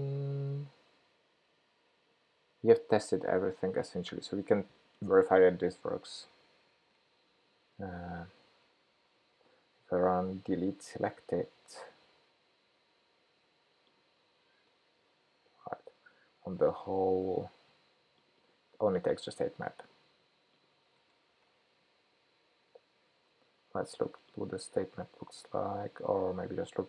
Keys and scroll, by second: 6.3 shift+super+p, 8.9 super+c, 16.1 super+v, 19.0 super+c, 21.4 super+v.